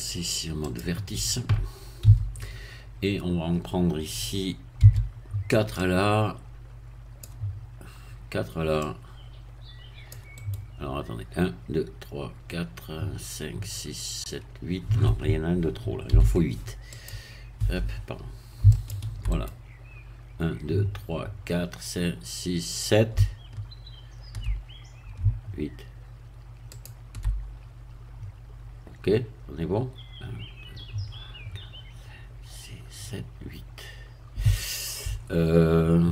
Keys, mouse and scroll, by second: 0.7 click, 2.1 a, 4.8 c, 5.8-7.4 drag, 8.9-10.3 drag, 10.4-11.7 right drag, 16.1 c, 16.9 click, 18.7 shift+click, 19.3 shift+right click, 26.7 shift+click.